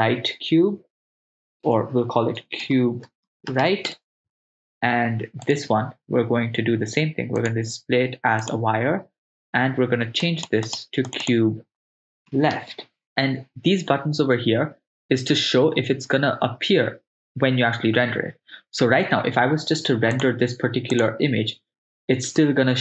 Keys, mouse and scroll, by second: 1.8 BackSpace, 5.6 right click, 7.4-9.2 drag, 10.3 click, 10.7 click, 11.1 click, 11.9-13.1 shift+drag, 20.2-22.8 drag.